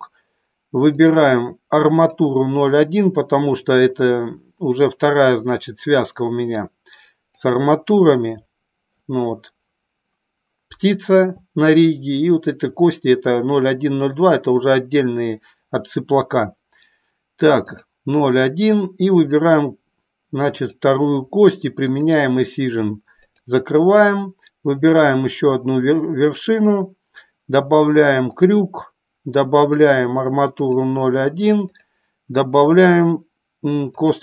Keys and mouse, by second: 0.9 click, 7.3 click, 19.2 click, 21.7 click, 24.8 click, 26.6 click, 29.6 click, 31.7 click.